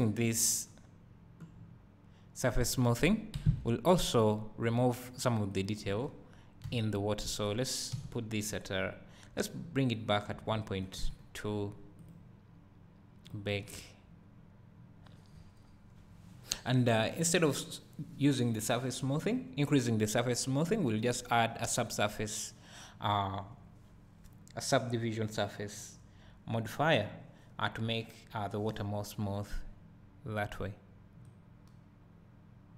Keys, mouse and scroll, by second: 3.1-3.5 scroll down 1, 3.5 Escape, 14.3 click, 31.3-32.7 right drag.